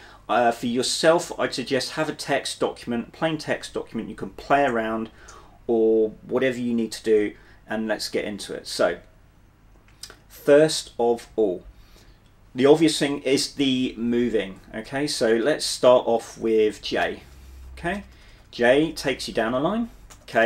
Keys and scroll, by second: 17.2-20.4 typing.